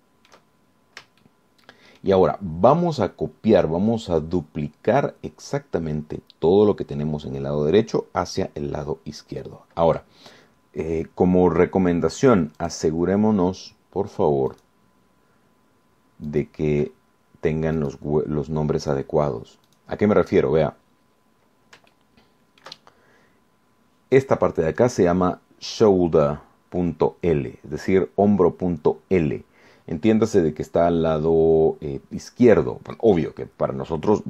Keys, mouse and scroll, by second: 0.9 shift+click, 1.9-2.3 shift+scroll up 4, 2.4-3.4 shift+drag, 3.6-4.1 shift+scroll down 2, 13.8 click, 15.7 click, 17.5 click, 19.0 click, 20.1 click, 20.9 click, 22.5 scroll up 1, 23.1 shift+click, 24.1 shift+scroll up 1.